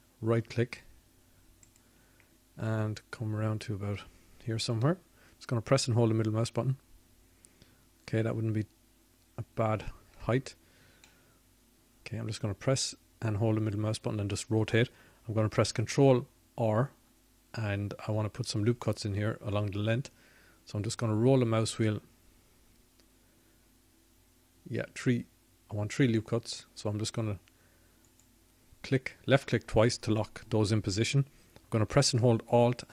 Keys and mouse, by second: 11.3 middle click, 12.6-14.1 middle drag, 15.9 middle click, 21.6 ctrl+r.